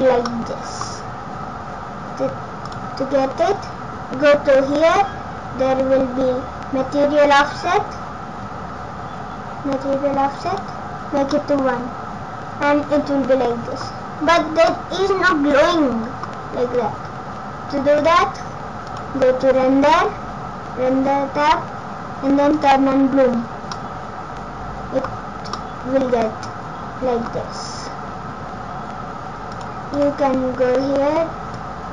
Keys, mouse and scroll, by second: 0.3 middle click, 2.7 click, 10.5 click, 11.3 middle click, 14.1-14.5 scroll down 5, 14.4 scroll up 5, 14.7 middle click, 18.0 click, 18.9 click, 22.8 click, 23.4-23.7 scroll down 6, 23.7 middle click, 23.7 scroll up 1, 25.1 scroll up 4, 25.6 middle click, 29.5 click, 31.6 click.